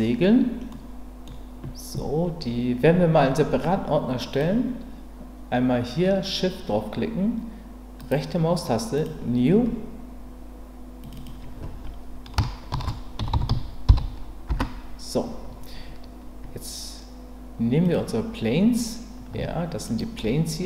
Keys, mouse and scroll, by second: 0.7-1.2 scroll up 1, 11.1-16.2 drag.